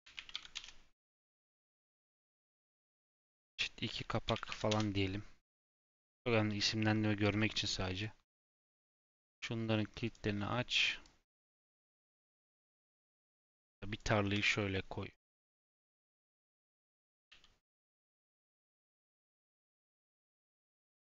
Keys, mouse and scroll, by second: 2.2 click, 2.6 F2, 7.3 shift+middle click, 8.0 click, 8.6 click, 10.0 click, 11.0 click, 13.5 click, 14.2 g, 16.1 ctrl+click, 17.1 g, 18.3 g, 19.6 click, 20.3 g.